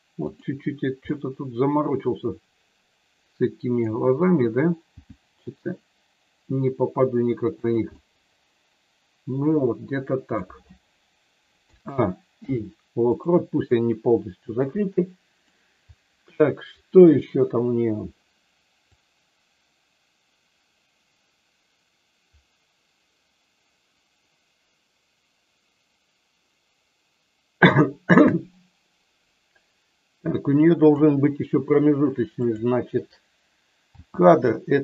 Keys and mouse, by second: 0.3 click, 1.0-3.8 middle drag, 4.9 g, 7.5 click, 8.0-10.4 middle drag, 11.7 a, 12.3 i, 13.7-15.4 middle drag, 19.0-30.9 drag, 32.4 click, 33.9 g.